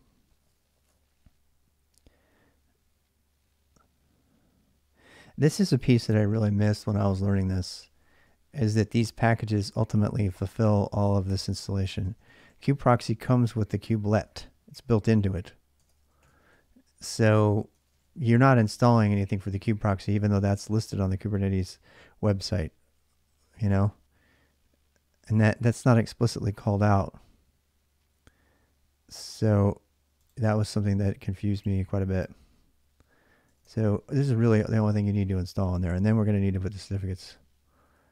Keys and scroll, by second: 1.2 j, 1.3 j, 5.9-14.5 typing, 11.7 ctrl+[, 15.6 ctrl+[, 15.8-19.3 typing, 16.0 Return, 33.2-35.0 typing, 36.3-38.0 typing.